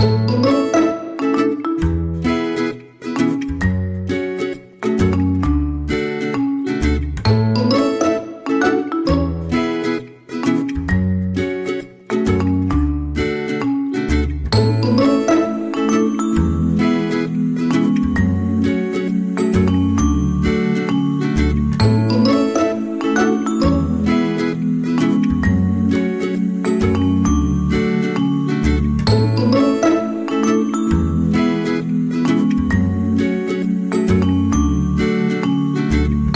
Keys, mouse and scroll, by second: 0.4 middle click, 3.7 KP_3, 7.2 click, 10.3 ctrl+alt+shift+c, 13.6 middle click, 17.0 scroll down 4, 17.4 middle click, 18.6 middle click, 20.0 KP_1, 21.1 KP_3, 22.0 scroll up 1, 23.5 click, 25.8 ctrl+alt+shift+c, 28.0-28.5 scroll up 2, 28.4 middle click, 32.8 middle click, 34.2 middle click.